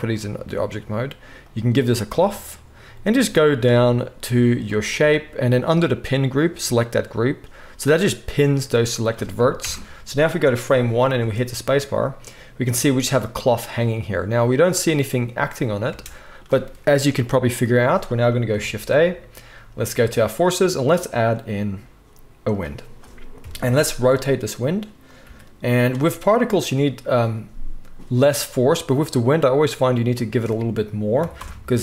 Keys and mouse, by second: 1.4-9.7 middle drag, 9.6 shift+Left, 11.2 space, 15.8 space, 18.6 shift+click, 18.6-25.2 shift+middle drag, 18.6 shift+right click, 18.7 shift+a, 23.4 KP_1, 24.1 r, 25.2-27.5 right drag, 25.2 g, 27.5-30.2 drag.